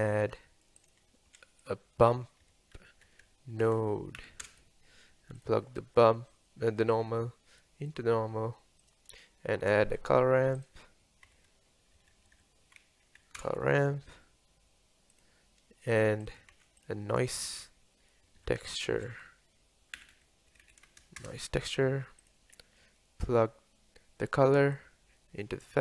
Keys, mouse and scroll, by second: 6.6 middle click, 6.8-7.9 drag, 8.2-8.9 middle drag, 8.9 click, 10.0 shift+a, 23.3-25.7 middle drag, 25.7-25.8 drag.